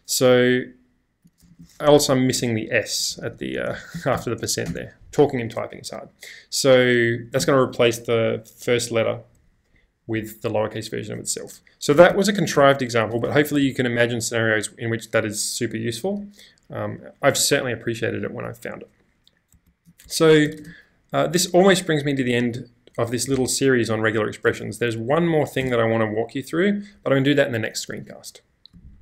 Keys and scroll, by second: 1.5 shift+;, 1.8 Up, 2.1-2.5 BackSpace, 7.4 y, 11.7-13.6 typing, 13.1 Escape, 13.2 Escape, 19.7 super+Tab, 20.0 super+Escape, 20.5 space, 20.6 space, 25.1 k, 25.6 Tab.